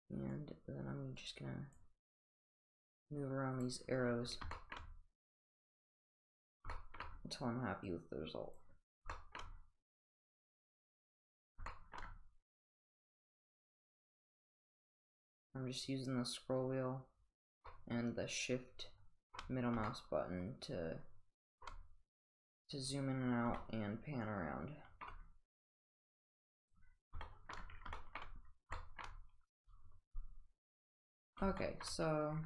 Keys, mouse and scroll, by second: 0.4-1.8 drag, 2.5-3.7 drag, 4.6 shift+middle drag, 5.5 click, 6.7 shift+middle drag, 7.9-8.6 drag, 9.1 shift+middle click, 10.3 click, 11.7 shift+middle click, 12.1 shift+middle click, 12.9-14.3 drag, 17.7-19.4 shift+middle drag, 19.4 shift+middle click, 19.9-21.7 shift+middle drag, 23.6-25.1 shift+middle drag, 26.0 click, 27.3 shift+middle click, 31.6 shift+middle drag.